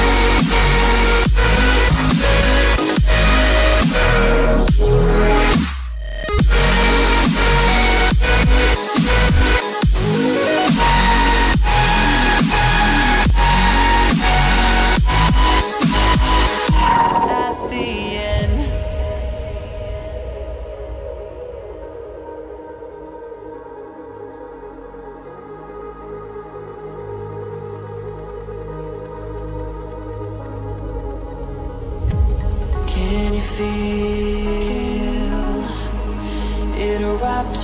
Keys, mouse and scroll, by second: 1.1 ctrl+c, 1.3 ctrl+v, 3.4 ctrl+z, 3.9 ctrl+v, 4.4 click, 10.5 right click, 11.0 click, 14.7 ctrl+c, 14.9 ctrl+v, 15.7 click, 25.7 right click, 26.4 click, 30.8 ctrl+c, 31.0 ctrl+v, 31.8 click, 33.9 right click, 34.4 click, 36.6 scroll up 1, 37.2 click.